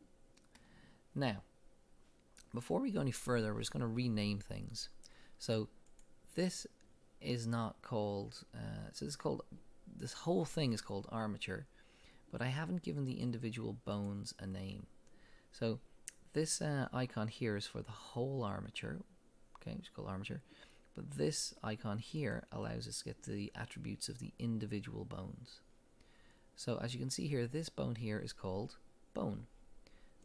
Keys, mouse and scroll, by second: 5.9 click, 13.1 click, 14.0 click, 22.2 click.